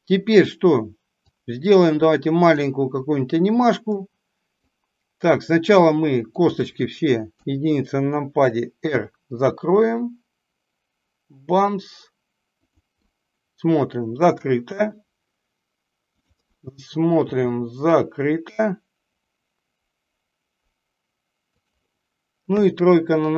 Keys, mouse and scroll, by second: 1.3-2.6 drag, 4.0 middle click, 6.2 click, 13.0-14.3 middle drag, 16.1 click.